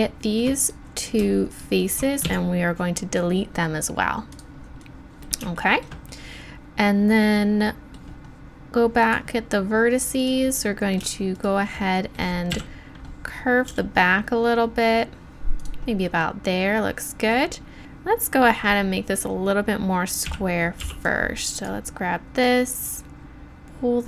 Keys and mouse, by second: 2.2 x, 3.4-5.5 drag, 10.5 middle click, 12.5 KP_7, 13.7 g, 16.1-17.8 drag, 17.8 z, 20.2 a, 20.8 b, 22.4-24.0 drag.